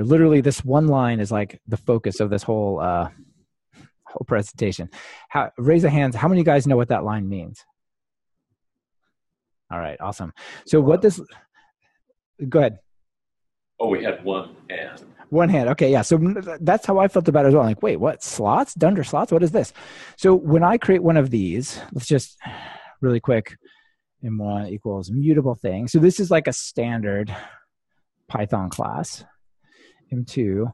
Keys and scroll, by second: 26.0 Return, 28.9 super+d.